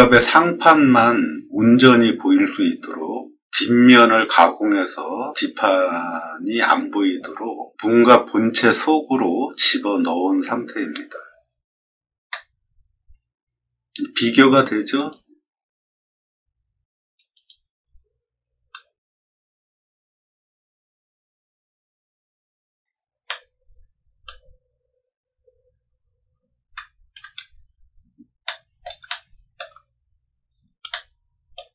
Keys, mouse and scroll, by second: 0.0-0.5 scroll down 4, 0.1 middle click, 12.2 middle click, 14.9 click, 17.3 click, 18.9-21.1 middle drag, 21.5 scroll up 1, 21.6 middle click, 21.7 middle click, 22.1 middle click, 22.2 middle click, 23.2-24.2 middle drag, 25.1-26.0 scroll up 6, 26.0 scroll down 1, 26.6 middle click, 27.5 middle click, 27.8 middle click, 28.1 middle click, 28.4 middle click, 29.0 shift+middle click, 29.9 middle click, 29.9 middle click, 30.8 shift+middle click.